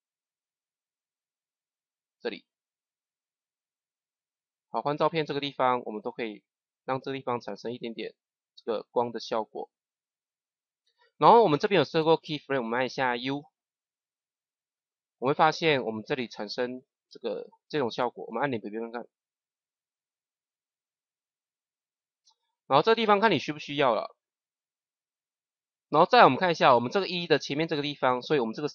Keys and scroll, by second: 13.1 u, 18.5 KP_0.